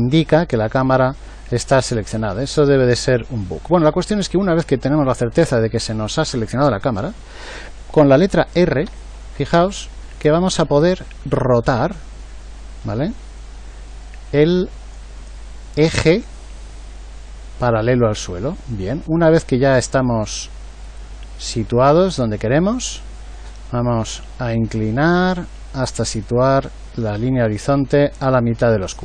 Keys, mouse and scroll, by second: 8.9 r.